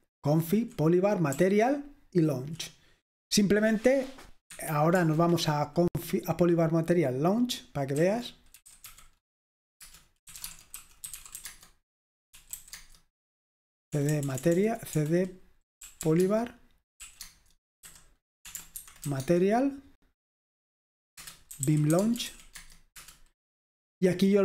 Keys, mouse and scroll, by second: 0.0-0.4 typing, 4.0 typing, 4.7 Escape, 7.9-12.9 typing, 9.8 Return, 14.0 BackSpace, 14.1 BackSpace, 14.2 BackSpace, 14.4 BackSpace, 15.6-19.1 typing, 21.3 Return, 21.3-22.8 typing, 23.0 Return.